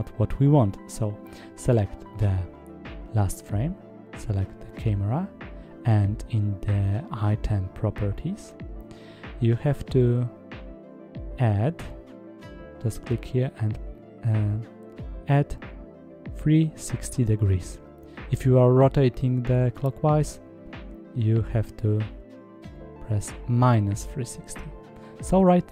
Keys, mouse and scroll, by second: 4.8 click, 5.9 click, 6.6 click, 11.7 click, 20.4 i, 20.6-25.7 drag.